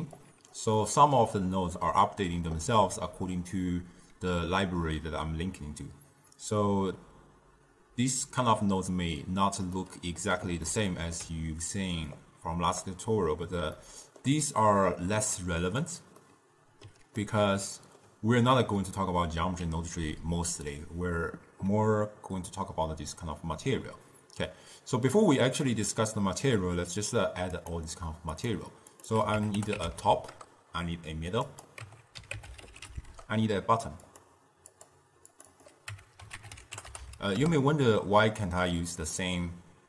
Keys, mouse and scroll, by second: 0.3 click, 0.9-4.0 middle drag, 9.9-12.3 middle drag, 12.3-13.9 drag, 13.9-20.3 middle drag, 24.7-27.0 middle drag, 27.0 click, 27.7 click, 28.5-32.8 drag, 32.8 d, 34.2 click, 34.8-35.6 drag, 36.7 click, 37.0 t.